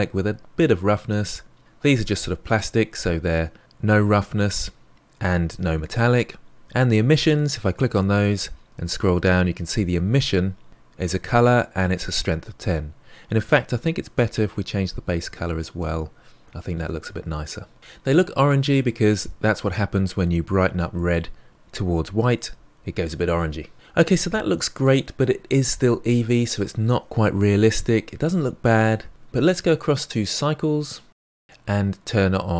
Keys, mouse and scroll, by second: 1.6 click, 7.2 click, 15.1 click.